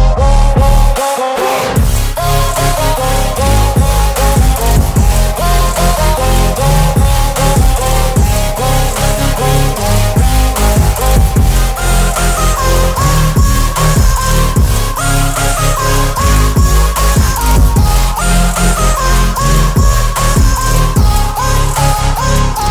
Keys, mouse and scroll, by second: 10.7 v, 11.1 ctrl+t, 13.9-17.0 alt+drag, 21.4-22.7 alt+click.